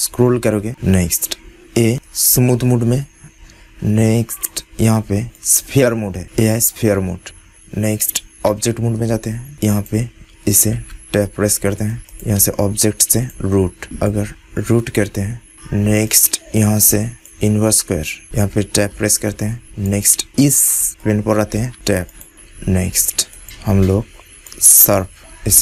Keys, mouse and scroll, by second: 0.8-3.9 middle drag, 4.2-7.5 drag, 8.4 Tab, 9.2 middle click, 9.6-15.5 drag, 10.7 Tab, 16.0-18.0 drag, 18.3 Tab, 19.1-21.9 drag, 21.5 Tab, 22.1 click, 23.3-25.6 drag, 25.1 Tab.